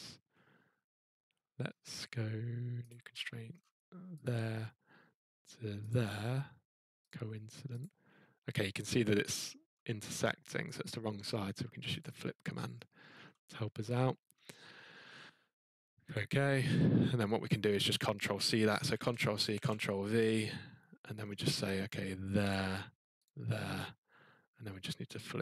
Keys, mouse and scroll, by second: 1.0 scroll, 1.6 middle click, 2.9 click, 3.5 middle click, 3.5 middle click, 4.2 click, 5.9 click, 7.1 click, 7.1-7.8 scroll, 7.8 click, 8.5-9.1 scroll, 10.8 scroll, 12.0 click, 12.7 scroll, 14.2 middle click, 16.1 click, 17.5 click, 18.9 ctrl+c, 19.5 ctrl+v, 21.0-21.5 scroll, 22.5 click, 22.5 scroll, 23.2 click, 25.2 click.